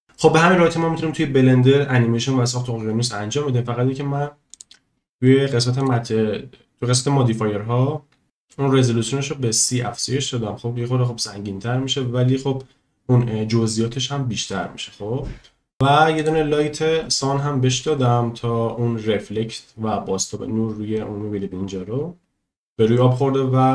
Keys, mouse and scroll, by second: 4.5 click, 5.8 click, 11.7 click, 16.2 click.